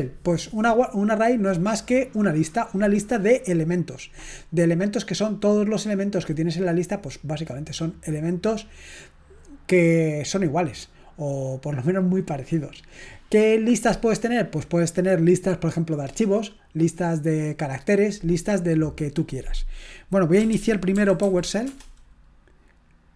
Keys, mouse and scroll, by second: 21.2 typing, 21.6 Return.